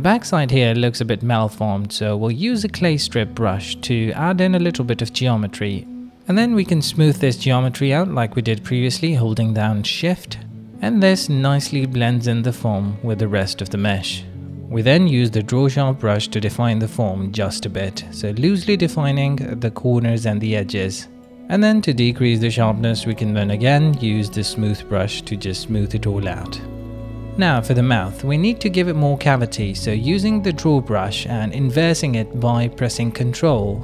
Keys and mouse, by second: 1.4 q, 2.5 click, 3.2 click, 3.2 middle click, 3.6 ctrl+z, 3.7 f, 4.2 f, 4.3 f, 5.3 middle click, 5.5 ctrl+z, 7.4 middle click, 8.1 middle click, 9.4 middle click, 10.1 click, 10.4 right click, 10.8 click, 11.4 click, 12.2 shift+click, 13.2 middle click, 14.7 middle click, 15.4 middle click, 17.6 right click, 18.2 ctrl+z, 18.4 ctrl+click, 18.9 click, 19.1 ctrl+click, 19.4 click, 19.9 click, 20.2 ctrl+alt+y, 20.4 ctrl+middle click, 21.0-22.8 drag, 23.4 click, 25.2 ctrl+z, 25.5 click, 26.0 shift+click, 26.2 click, 27.3 shift+click, 27.7 shift+middle click, 27.9 middle click, 28.8 shift+middle click, 29.1 middle click, 29.7 click, 32.7 click, 33.7 shift+middle click.